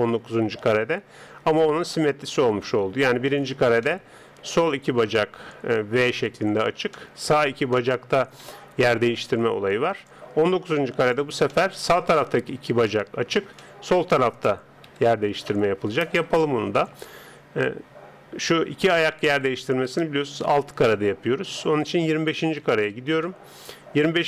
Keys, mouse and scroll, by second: 3.8-10.0 middle drag, 10.0 click, 11.5-14.9 middle drag, 14.9 KP_3, 21.8 click.